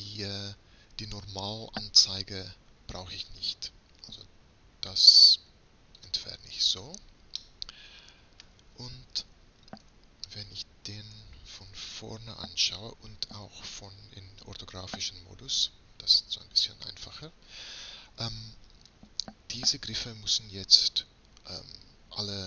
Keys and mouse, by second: 3.3-5.0 drag, 6.1-7.5 drag, 7.5 middle click, 9.9 KP_3, 11.2 KP_1, 15.0 KP_5.